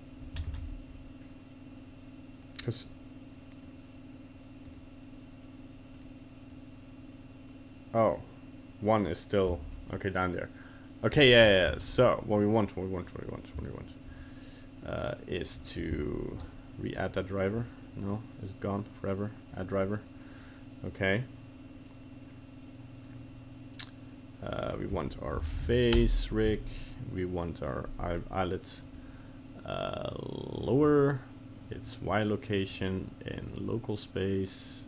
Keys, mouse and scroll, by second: 0.5 ctrl+Tab, 0.6 right click, 2.4 click, 4.7 right click, 6.5 click, 11.9 ctrl+z, 13.0 right click, 13.6 right click, 15.0 right click, 16.1 ctrl+z, 17.1 right click, 18.0 right click.